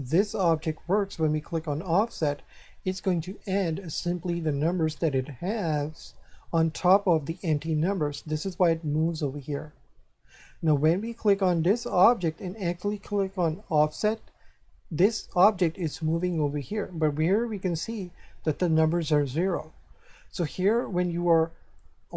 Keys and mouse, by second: 0.1 right click, 11.5 right click, 13.6 click.